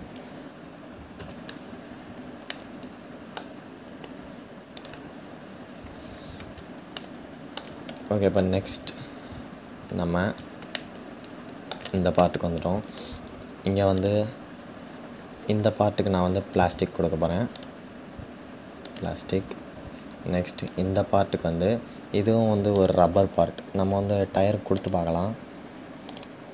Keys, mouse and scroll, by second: 1.0 Tab, 1.2-2.1 scroll down 3, 2.1-3.1 middle drag, 3.1-4.4 scroll down 3, 4.4-6.5 scroll down 5, 6.5 scroll down 2, 6.5-8.7 shift+middle drag, 8.7-9.5 scroll up 5, 9.5-9.8 scroll down 1, 11.2-13.6 shift+middle drag, 13.6 click, 18.5-20.2 drag, 24.4-25.7 drag, 26.1-26.5 scroll down 2.